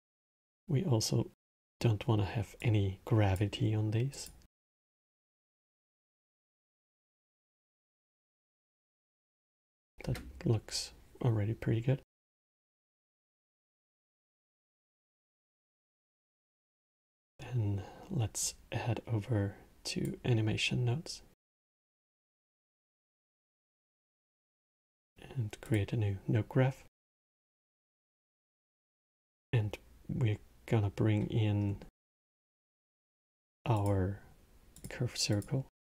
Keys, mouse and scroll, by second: 1.2-6.9 drag, 7.9-8.5 middle drag, 8.5 space, 9.7 space, 13.8-16.8 middle drag, 18.1-27.1 drag, 27.1-28.4 middle drag, 34.6 click.